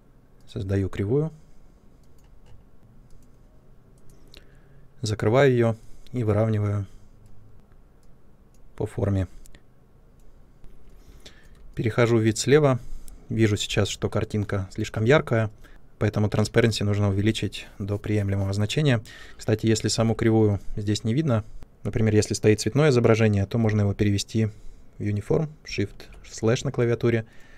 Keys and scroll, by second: 10.6 ctrl+space, 13.6 5, 19.8 3, 25.8 shift+/.